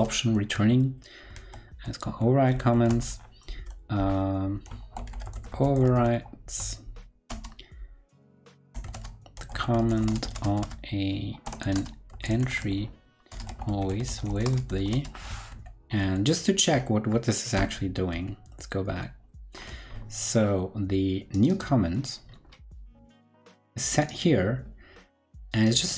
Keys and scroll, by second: 1.3 super+v, 15.4 ctrl+super+Left, 15.9 ctrl+super+Left, 17.5 ctrl+super+Left, 18.0 ctrl+super+Left, 18.8 ctrl+super+Left.